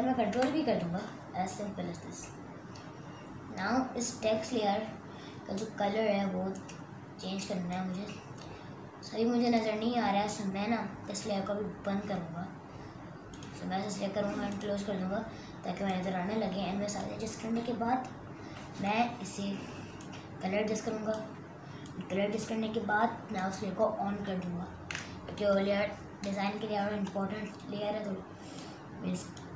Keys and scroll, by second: 0.3 ctrl+v, 18.3 ctrl+t.